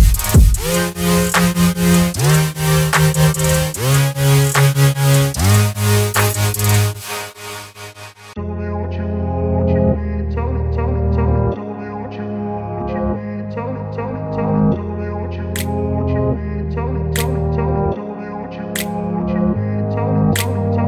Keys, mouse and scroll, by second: 7.1 click, 10.7 click, 13.0 ctrl+d, 16.2 right click, 17.6 click.